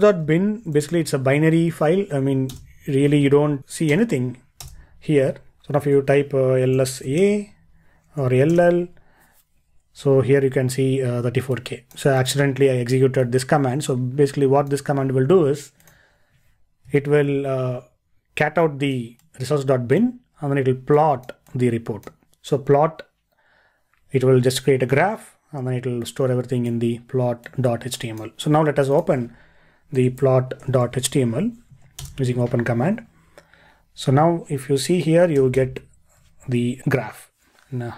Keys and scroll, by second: 17.2 ctrl+e, 35.4 super++, 35.6 super++.